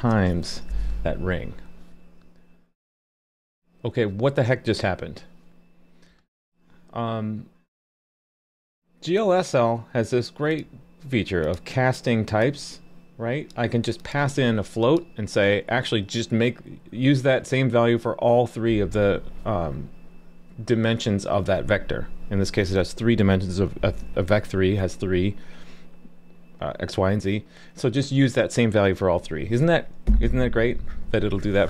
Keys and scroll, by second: 0.0 super+v, 0.4 super+s.